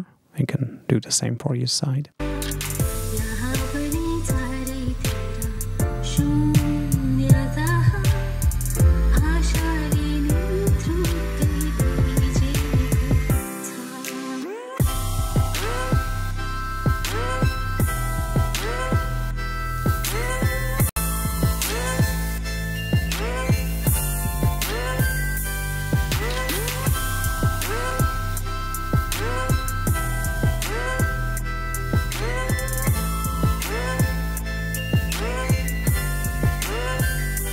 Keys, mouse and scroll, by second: 2.0 space, 5.9 click, 6.4-10.0 drag, 10.0-10.4 scroll down 1, 10.6-17.0 drag, 27.6-29.4 drag, 32.3 click, 34.6 click, 34.6-37.5 scroll up 6.